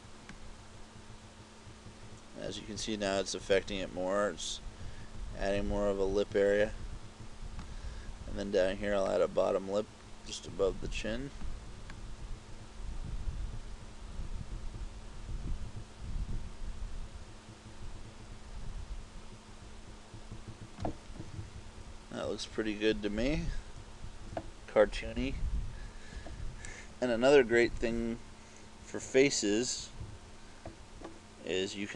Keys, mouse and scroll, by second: 0.4 click, 9.1 click, 12.0 click, 21.4-22.5 typing, 23.8 KP_4, 24.1 KP_4, 24.3 KP_4, 27.5 KP_Subtract, 27.8 KP_Subtract, 28.9 KP_1, 30.1 KP_5, 30.8 KP_Subtract.